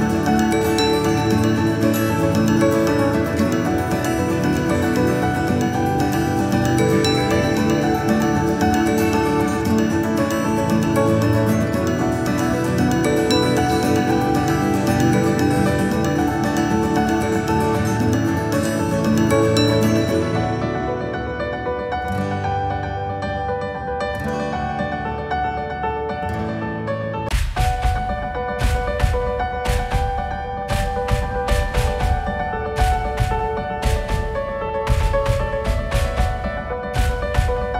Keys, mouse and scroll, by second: 3.1-4.9 drag, 5.5 click, 9.5 click, 10.1 g, 13.8-14.9 scroll down 1, 15.0 s, 18.9 g, 22.3 shift+d, 29.4 r, 32.5 g.